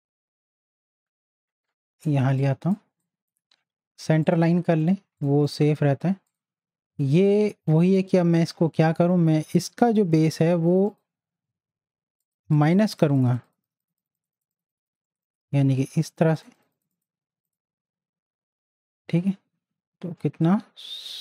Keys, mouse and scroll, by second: 2.2 space, 2.4 click, 2.7 space, 3.0 click, 5.3 space, 5.5 click, 5.8 space, 6.3 click, 10.8 click.